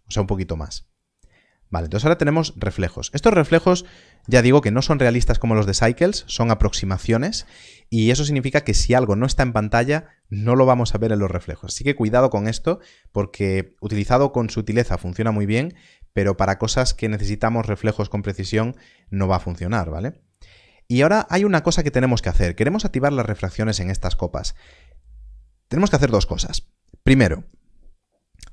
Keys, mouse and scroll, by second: 4.0 KP_0, 28.2 KP_0.